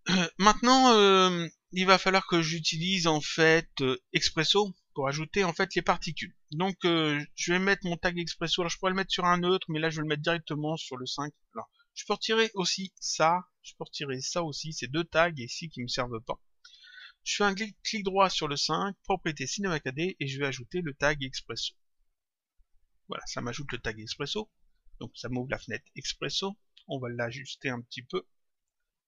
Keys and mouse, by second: 4.9 click, 12.3 click, 13.0 Delete, 13.9 click, 14.6 Delete, 18.2 right click, 22.3 click, 24.5 click, 27.0 click, 28.5 click.